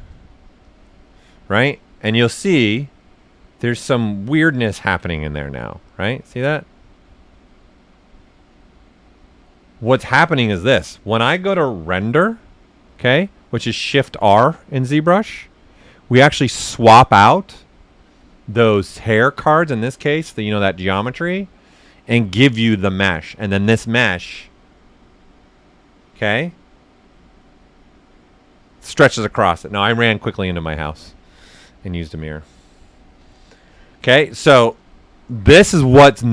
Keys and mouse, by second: 1.2 right click, 2.8-9.9 ctrl+right drag, 12.8 shift+r.